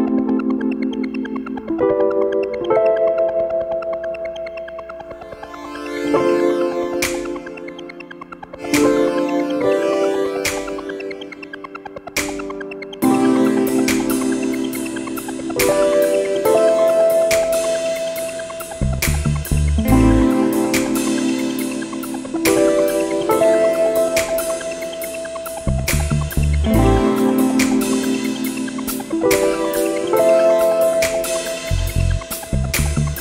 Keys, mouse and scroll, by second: 2.0 click, 5.0 click, 6.6 click, 8.1 click, 9.7 click, 11.0 0, 12.2 ,, 12.6 1, 14.0 click, 16.8 click, 17.5 click, 18.3 click, 18.7 0, 20.3 click, 20.6 click, 21.6-22.3 drag, 22.8 0, 24.0 2, 24.7-25.2 scroll down 2, 26.1 click, 28.5 click, 28.9 click.